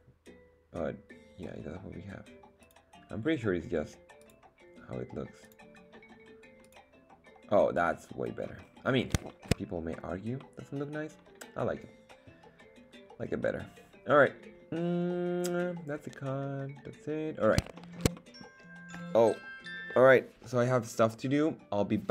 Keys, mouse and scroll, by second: 2.6-4.4 drag, 5.4-6.9 drag, 7.5-8.4 middle drag, 8.6-9.1 scroll down 4, 9.3 shift+middle click, 10.4-18.5 middle drag.